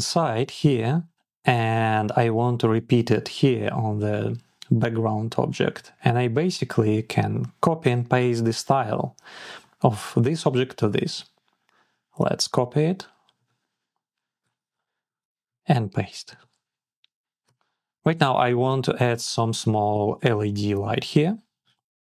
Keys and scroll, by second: 13.2 alt+super+c, 16.1 alt+super+v.